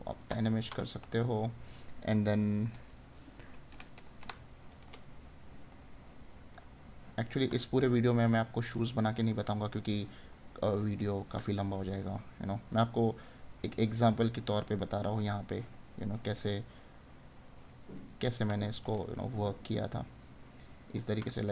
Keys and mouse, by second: 0.3 right click, 10.9 right click, 17.4 right click, 20.4 right click.